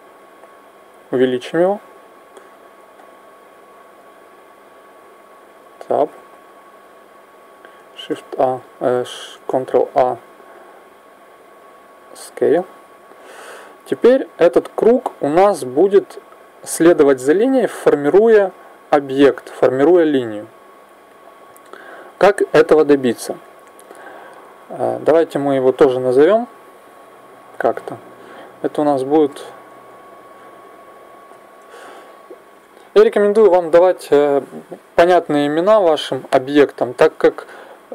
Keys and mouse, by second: 0.8 s, 3.7-5.4 middle drag, 5.4 Tab, 7.9 shift+a, 9.9 ctrl+a, 13.4 middle click, 14.9 right click, 25.1-26.2 middle drag, 26.2 n, 28.6 click.